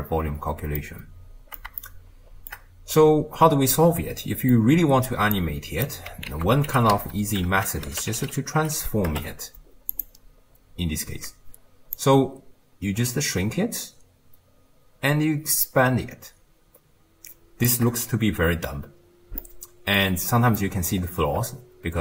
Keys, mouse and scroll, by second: 0.8-5.4 middle drag, 5.4 click, 6.3 ctrl+a, 7.7 BackSpace, 10.6-11.7 scroll down 1, 12.0-15.6 shift+drag, 19.4-20.2 middle drag, 20.2-20.6 scroll down 2, 20.6-21.0 middle drag, 21.0-22.0 scroll up 1.